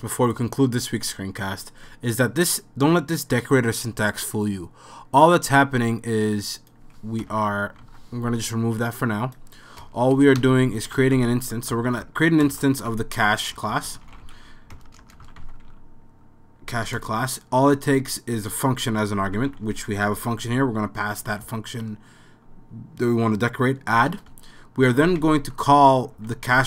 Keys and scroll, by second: 7.2 BackSpace, 7.8 BackSpace, 9.8-17.4 typing, 10.4 Return, 19.0-20.1 typing, 21.4 Right, 23.9 Return, 24.6-26.6 typing.